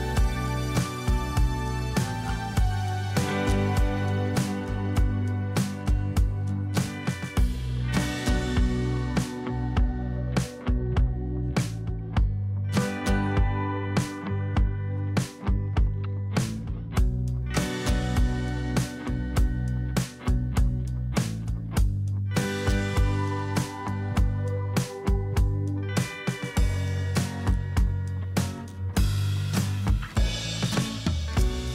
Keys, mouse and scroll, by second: 3.7 ctrl+[, 4.4 ctrl+[, 5.1 t, 8.4 typing, 8.4 Return, 10.4-12.4 scroll down 1, 13.0 shift+click, 15.3 scroll down 1, 16.1 space, 23.1 ctrl+t, 28.5 shift+click, 30.0 shift+click.